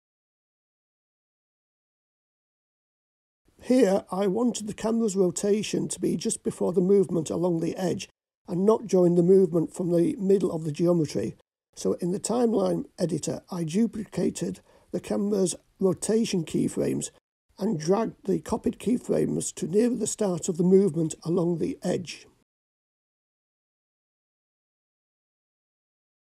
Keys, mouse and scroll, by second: 0.0-3.3 drag, 6.1 click, 8.7-9.7 drag, 9.9 drag, 10.7-12.8 drag, 14.0 click, 16.2 click, 17.4 click, 19.0-20.1 drag, 21.1 click, 25.8 click.